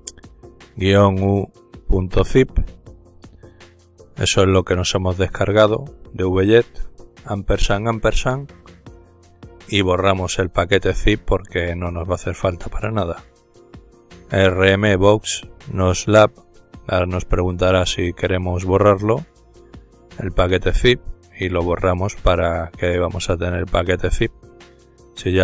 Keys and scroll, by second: 0.0-3.6 typing, 5.3-11.7 typing, 12.9-16.5 typing, 18.5-22.2 typing, 24.0-24.4 typing.